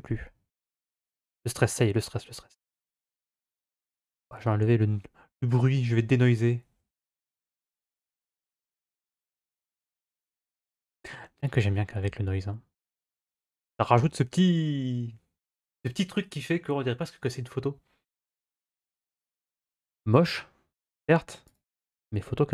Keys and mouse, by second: 4.0 click, 13.2 click, 21.4-22.5 drag.